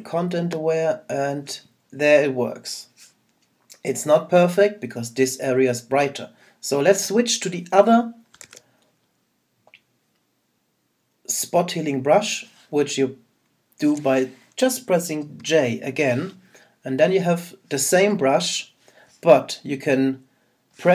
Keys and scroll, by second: 8.4 super+z.